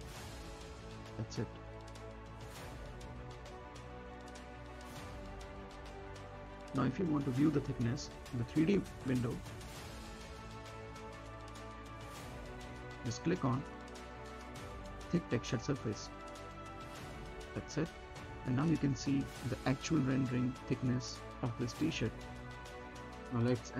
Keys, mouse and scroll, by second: 0.9 1, 2.0-5.4 drag, 5.4 space, 6.8 click, 7.5 space, 8.5 click, 9.1-9.5 scroll down 1, 9.5 middle click, 9.7 scroll down 1, 10.0 middle click, 10.3 right click, 10.8 scroll down 1, 11.0 middle click, 12.1-13.8 right drag, 13.8 click, 18.4-18.7 scroll up 1, 18.9 middle click, 19.5-20.6 scroll down 1, 21.2 middle click, 22.3 scroll up 1, 22.9 right click, 23.4 middle click, 23.6-23.7 drag.